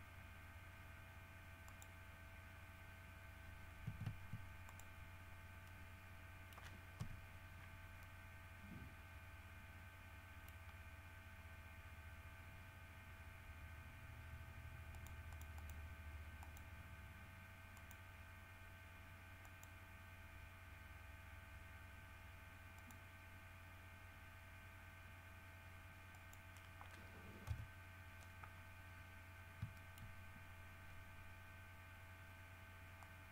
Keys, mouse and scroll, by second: 0.1 scroll down 2, 1.8 middle click, 4.8 ctrl+middle click, 5.8-6.9 middle drag, 8.2-10.9 middle drag, 11.1 scroll up 1, 13.3 scroll down 1, 15.1 middle click, 16.6 click, 17.9 click, 19.6 click, 22.9 click, 26.3 click, 27.7 KP_7, 29.0-29.3 scroll down 2, 29.9 shift+middle click, 33.2-33.3 drag.